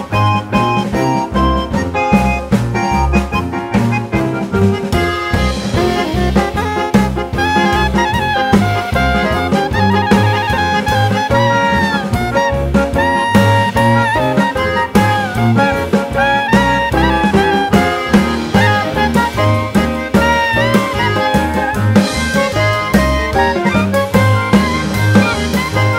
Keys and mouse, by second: 0.5 click, 0.9 click, 1.1 shift+click, 1.9 click, 2.7 click, 3.1 click, 3.9 click, 4.3 click, 5.0 click, 5.3 click, 5.6 click, 5.8 shift+click, 6.5 click, 6.9 shift+click, 7.4 click, 7.8 click, 8.6 shift+click, 9.2 click, 9.5 click, 9.6 shift+click, 10.0 click, 10.4 click, 10.6 click, 11.0 click, 11.2 click, 11.6 click, 11.8 click, 12.1 click, 12.3 click, 12.9 click, 13.5 click, 13.7 shift+click, 14.1 click, 14.3 click, 14.7 shift+click, 15.5 click, 15.6 click, 15.9 click, 16.2 shift+click, 16.9 click, 17.2 shift+click, 17.7 click, 19.6 click.